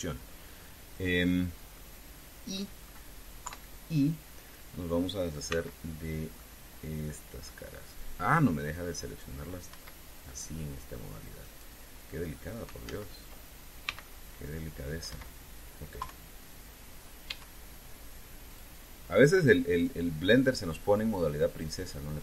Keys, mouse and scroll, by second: 2.5 middle click, 3.5 click, 4.2 KP_3, 6.3 c, 7.1-9.3 drag, 10.5 Escape, 11.0 click, 12.1 right click, 13.6 ctrl+z, 14.6 c, 14.8-16.0 drag, 15.8 Escape, 16.7 KP_3, 18.0 e, 19.3 click, 20.6-22.2 drag.